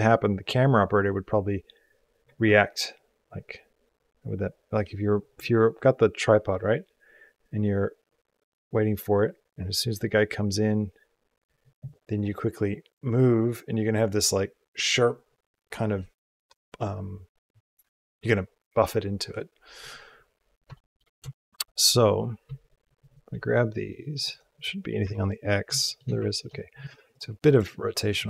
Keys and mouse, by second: 20.6 shift+middle click, 21.2 shift+middle click, 23.9 click, 24.8 KP_Decimal, 26.2 ctrl+middle click.